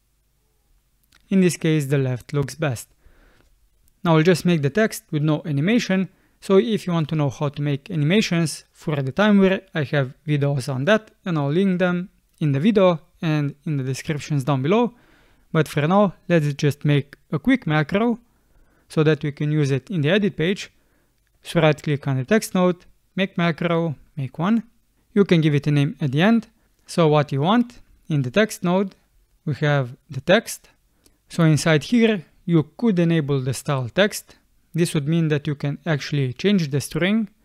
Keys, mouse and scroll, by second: 3.1 space.